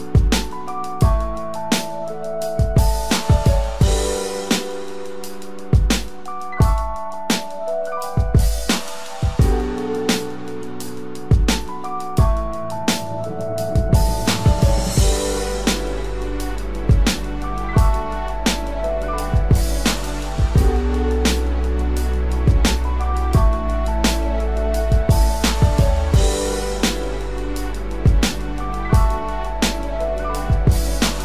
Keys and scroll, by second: 2.3 ctrl+=, 2.5 ctrl+space, 3.0 ctrl+=, 18.0 ctrl+-, 19.2 ctrl+=, 24.7 ctrl+-.